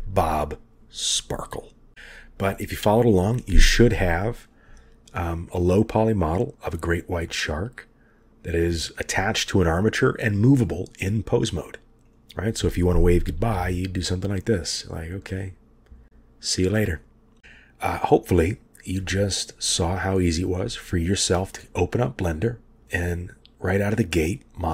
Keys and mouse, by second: 5.5-6.9 middle drag, 7.4-8.4 middle drag, 8.9-9.2 middle drag, 9.9 middle drag, 13.6 g, 20.8-21.2 shift+middle drag.